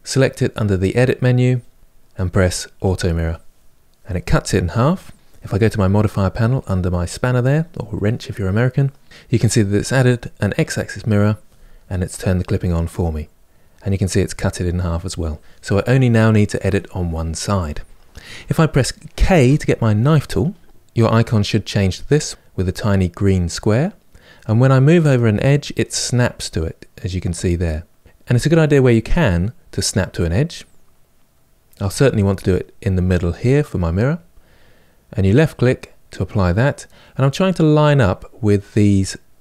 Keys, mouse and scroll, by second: 2.5-5.1 drag, 6.3 click, 13.4 click, 14.0 click, 19.1 k.